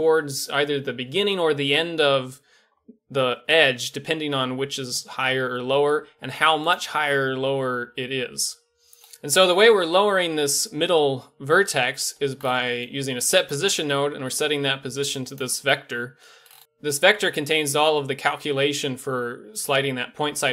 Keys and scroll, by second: 2.6 g, 5.4 g, 7.0 g, 9.0 a.